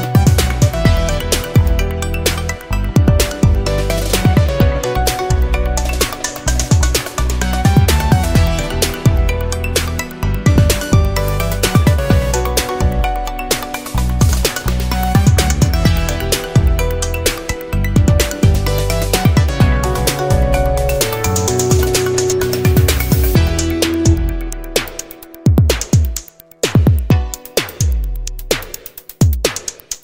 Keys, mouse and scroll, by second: 0.4 click, 0.9 click, 1.8 0, 2.8 scroll down 2, 3.5 scroll up 2, 4.3 scroll down 2, 5.6 click, 7.1-8.1 drag, 9.2-9.9 drag, 11.3 click, 13.1 click, 13.8 click, 14.3 click, 16.9 click, 18.1 click, 19.5 click, 21.2 click, 22.7 click, 24.6 click, 26.7 click, 27.8 click, 28.8-30.0 middle drag.